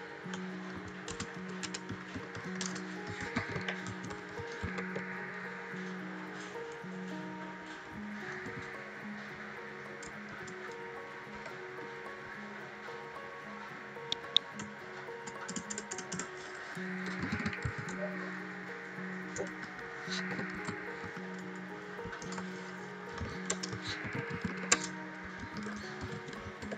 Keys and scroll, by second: 0.7-5.2 typing, 6.6 Left, 8.4 r, 10.2 shift+', 11.3 Right, 14.5 BackSpace, 15.1 BackSpace, 16.8-18.1 typing, 19.4-26.7 typing.